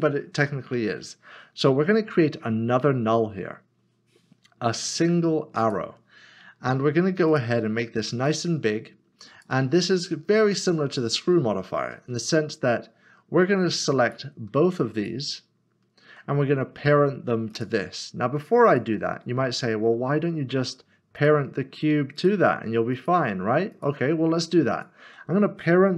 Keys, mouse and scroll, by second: 2.7 a, 5.6 click, 10.6 click, 14.1 click, 15.0 shift+click, 17.5 click, 19.6 middle click, 21.2 click, 22.2 shift+click, 23.8 click, 24.7 shift+click.